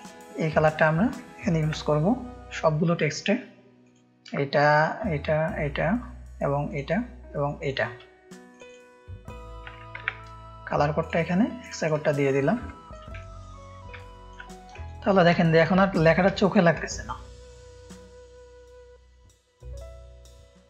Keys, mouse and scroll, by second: 1.5 ctrl+c, 2.8 space, 3.0 click, 3.8 click, 4.7-8.0 shift+drag, 8.6 click, 10.0 ctrl+v, 11.7 click, 12.0 click, 12.0 space, 12.6 ctrl+space, 12.6 ctrl+click, 13.1 click, 13.3 space, 13.9 ctrl+click, 14.0 ctrl+space, 14.8 click, 14.8 space, 15.3 ctrl+space, 15.3 ctrl+click, 16.3 ctrl+space, 16.3 ctrl+click, 16.8 click, 16.9 space, 17.2 ctrl+2, 17.4 click, 17.9 click, 19.0 ctrl+space, 19.0 ctrl+click, 20.3-20.6 drag.